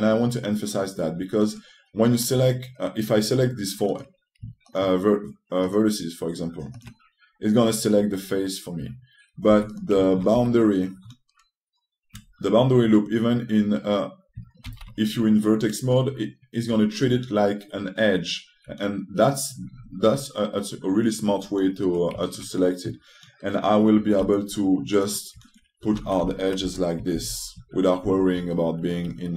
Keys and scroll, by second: 10.2 2, 12.0 typing, 15.3 c, 24.9 t, 26.7 a.